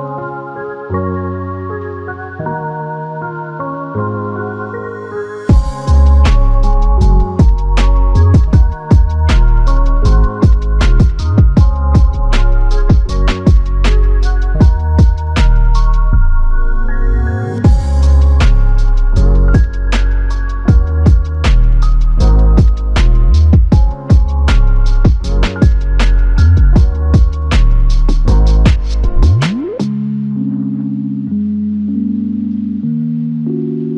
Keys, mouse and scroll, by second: 1.7 alt+shift+click, 5.3 alt+click, 6.4 ctrl+alt+click, 14.5 double click, 20.6 typing, 20.8 alt+click, 23.8 shift+click, 25.5 shift+click, 29.0 shift+click, 29.2 shift+click, 33.3 c.